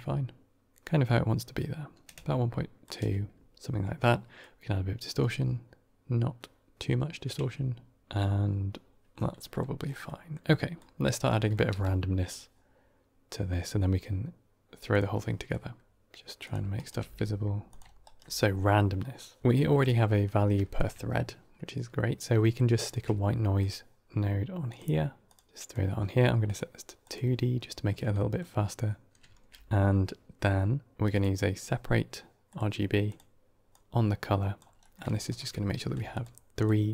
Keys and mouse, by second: 0.4-2.7 shift+drag, 4.3-8.0 drag, 9.3 middle click, 10.0 middle click, 10.7 drag, 11.2 middle click, 11.6 g, 15.0 middle click, 15.8 g, 16.9 g, 18.1 g, 18.2 g, 20.6 ctrl+shift+click, 22.3 middle click, 22.7 shift+a, 25.5 click, 26.3-27.0 drag, 28.0 middle click, 29.1 shift+a, 33.6-34.5 drag, 34.8 middle click, 35.2 ctrl+shift+click, 36.0 ctrl+shift+click, 36.4 ctrl+shift+click, 36.8 ctrl+shift+click.